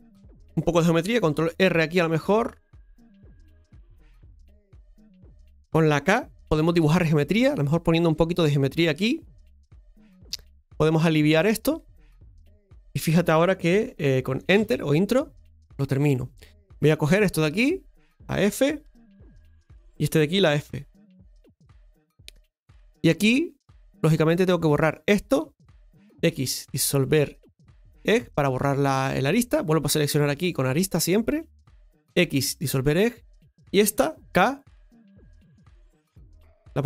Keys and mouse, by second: 1.3 ctrl+r, 17.0 right click, 17.5 shift+right click, 18.8 f, 19.8 right click, 20.6 f, 24.8 right click, 27.9 x, 29.5 right click, 32.5 x.